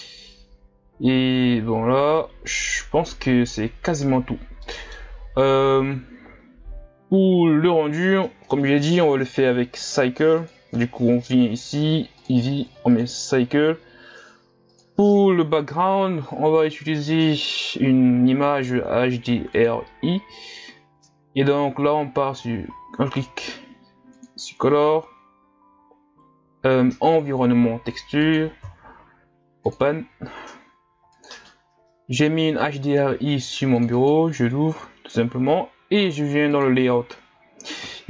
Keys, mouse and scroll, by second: 4.7-5.3 middle drag, 5.3-7.9 scroll up 1, 7.9-8.4 scroll up 1, 8.4-9.6 scroll up 1, 9.6-10.4 scroll up 1, 10.4-11.1 scroll up 1, 11.1-13.2 scroll up 1, 13.2-18.3 drag, 28.3-29.9 drag, 34.0 click, 36.6 click.